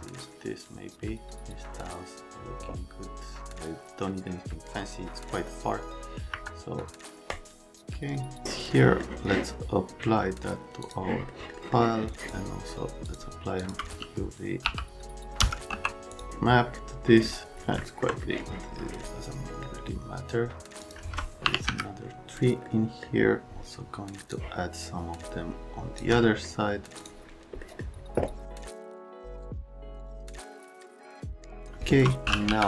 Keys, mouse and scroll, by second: 4.8 right click, 6.3 Escape, 6.8 click, 7.3 click, 8.7 right click, 10.8 click, 11.3 right click, 11.6 right click, 12.1 click, 13.0 click, 13.6 click, 14.6 u, 15.4 c, 15.7 q, 16.1 click, 17.8 alt+right click, 20.8 click, 21.2-22.1 typing, 22.6 right click, 24.3 shift+middle click, 24.8 click, 27.0 click, 27.6 middle click, 28.5 middle click, 29.1 shift+click, 29.6 click, 29.7 alt+middle click, 30.1 click, 30.6 x, 31.3 click, 31.6 click, 32.2 t.